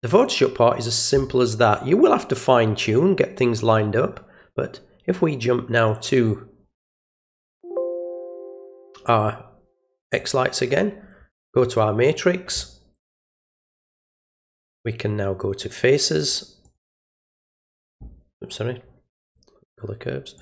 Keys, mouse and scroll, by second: 5.0 alt+click, 7.5 click, 10.0 click, 11.6 click, 16.1 click, 16.6 click, 19.2 click, 20.3 click.